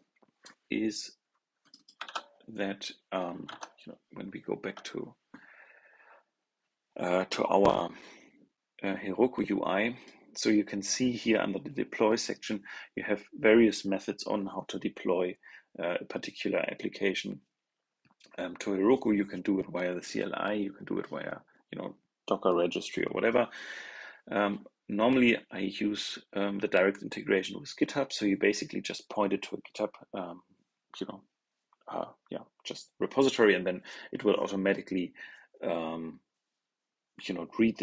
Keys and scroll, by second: 1.9 super+c, 3.4 super+Tab.